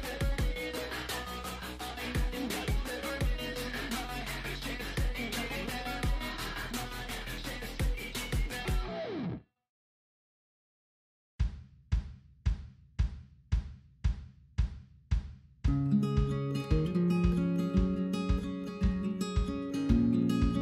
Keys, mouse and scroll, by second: 0.4 scroll up 2, 0.6 shift+middle click, 1.0 ctrl+click, 1.9 scroll down 1, 2.1 shift+middle click, 2.3 scroll up 2, 2.4 shift+middle click, 3.0-4.3 ctrl+drag, 4.3 shift+middle click, 4.8-5.4 scroll up 2, 5.4-7.6 ctrl+drag, 7.6-8.7 ctrl+z, 9.2 shift+middle click, 9.7-10.5 scroll up 1, 10.5-11.6 ctrl+drag, 11.6 scroll down 1, 12.0 shift+middle click, 12.7-13.1 scroll up 2, 13.1-13.8 ctrl+z, 14.0 ctrl+z, 14.2 middle click, 14.5 scroll down 6, 14.6-15.9 middle drag, 15.9 scroll down 1, 16.1-17.5 shift+middle drag, 17.5 scroll down 1, 18.4 click, 19.0-20.2 middle drag, 20.2-20.6 scroll up 1.